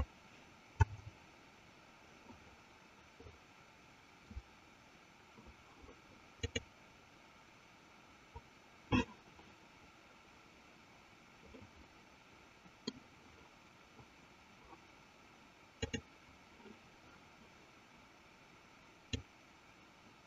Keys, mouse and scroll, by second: 1.2 KP_0, 12.0-13.1 middle drag, 19.4-20.2 drag.